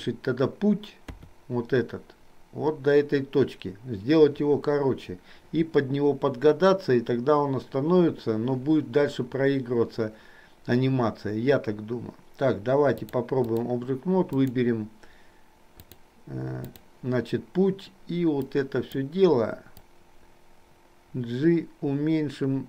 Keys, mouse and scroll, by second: 13.1 click, 14.5 click, 15.9-17.0 drag, 18.6 click, 19.8-22.6 drag.